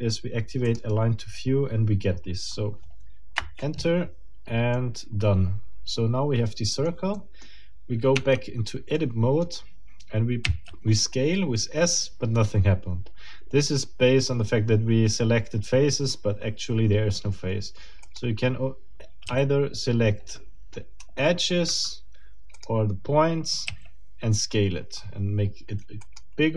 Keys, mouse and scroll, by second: 0.7 click, 3.4 Return, 4.7-7.0 middle drag, 7.2 middle click, 8.2 Tab, 9.0 middle click, 10.4 s, 18.0 middle click, 19.2 s, 21.0 Escape, 22.6 middle click, 23.7 s, 26.0 click.